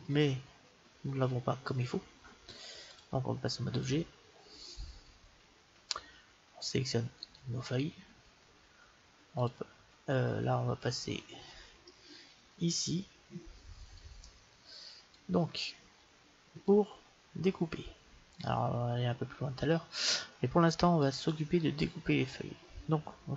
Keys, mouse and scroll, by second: 2.8-4.7 drag, 7.2-9.0 right drag, 9.4-11.0 drag, 11.7-13.5 middle drag, 13.9-15.6 drag, 15.8-17.6 drag, 18.2-20.0 drag.